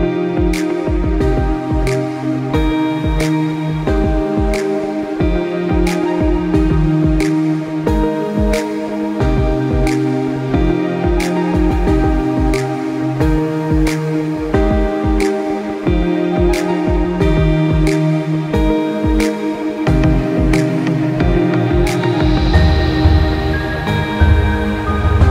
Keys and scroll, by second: 9.4 ctrl+0.